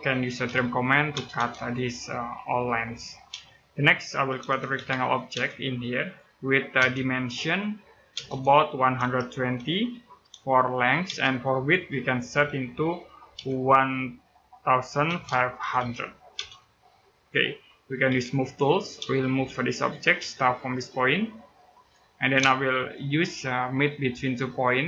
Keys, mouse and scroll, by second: 0.0-0.9 typing, 1.5 click, 3.1-5.1 typing, 3.5 middle click, 6.4 click, 6.5 d, 7.9-9.3 typing, 10.8 space, 13.2 typing, 14.6-16.2 typing, 16.9 click, 17.8 m, 18.8 space, 19.1 click, 19.9 space, 21.5 click, 22.5 shift+right click, 24.3 click.